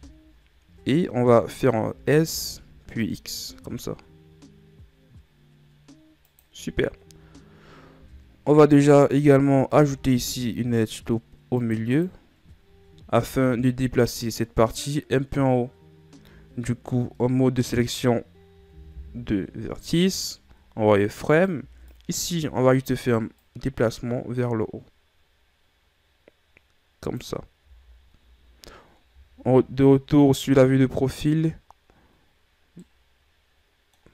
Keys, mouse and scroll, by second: 0.2 KP_1, 1.3 scroll up 2, 2.1 s, 9.9 ctrl+r, 13.5 ctrl+Tab, 16.8-17.4 scroll up 2, 17.4-19.0 middle drag, 19.0 KP_1, 20.7 z, 21.5 right click, 21.8 b, 23.6-26.7 drag, 27.9 z, 29.7 KP_3, 33.1-34.1 middle drag.